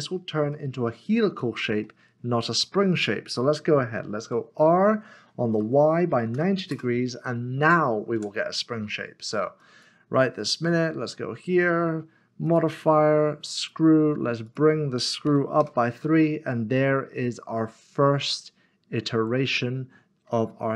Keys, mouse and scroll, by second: 0.5 middle click, 3.1 middle click, 5.5-6.1 typing, 6.7 Return, 8.2 Tab, 8.5 middle click, 9.1 scroll down 1, 9.6 click, 15.3 typing, 15.6 Return, 17.7 middle click.